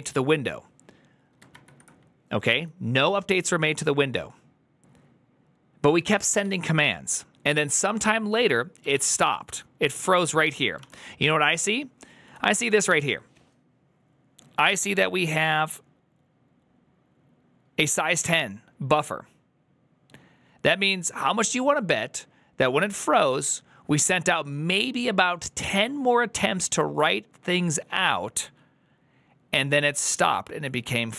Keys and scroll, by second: 4.0 typing, 5.8 typing, 8.6-12.7 typing.